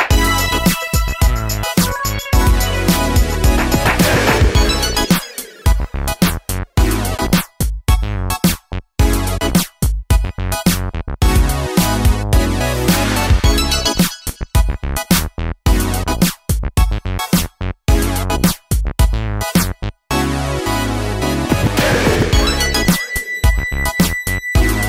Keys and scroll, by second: 1.3 Down, 1.3 Down, 5.4 super+c, 5.5 super+v, 7.2 super+v, 9.1 super+v, 10.4 super+v, 11.4 super+v, 12.6 super+v, 13.9 super+v, 15.3 super+v, 16.0 super+v.